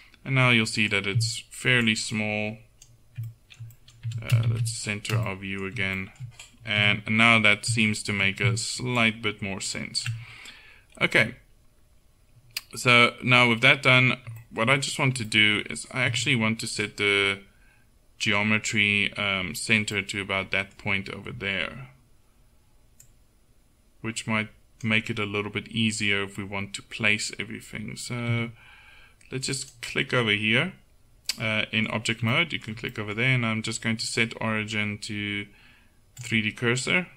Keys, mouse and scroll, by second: 1.9 click, 2.7 click, 4.5 shift+c, 6.8 KP_1, 9.0-10.1 drag, 10.3 click, 16.2 Tab, 17.0 right click, 20.1-22.0 middle drag, 23.1-28.4 drag, 28.4 Tab, 29.6-31.4 drag, 31.9-34.2 middle drag, 34.2-36.3 right drag, 36.9-37.1 middle drag.